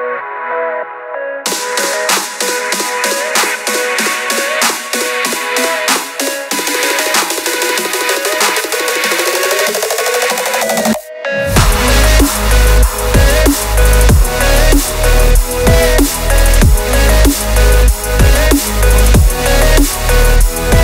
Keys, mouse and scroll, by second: 0.0 shift+click, 0.2 shift+drag, 0.5 g, 1.3 shift+click, 1.5 g, 2.7 scroll up 2, 2.8-3.1 shift+middle drag, 3.3 click, 3.5 shift+click, 3.9 shift+click, 4.1 shift+drag, 4.3 shift+drag, 4.5 shift+click, 4.7 shift+click, 4.9 shift+drag, 5.2 shift+click, 5.6 shift+drag, 5.9 g, 6.7 g, 7.5-8.6 scroll down 8, 8.0 shift+middle click, 8.6-8.9 shift+middle drag, 8.9-9.3 scroll down 2, 9.5-9.9 scroll up 1, 9.9 shift+right click, 10.2 shift+a, 20.1 scroll up 1, 20.1 shift+middle drag, 20.3 Tab, 20.5 e.